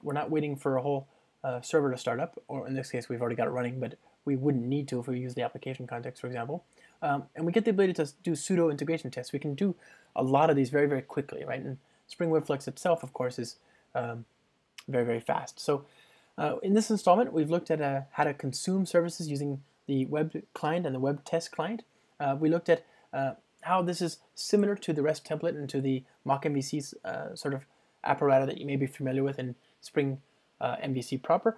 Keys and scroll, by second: 0.1 alt+super+l, 13.0 ctrl+r.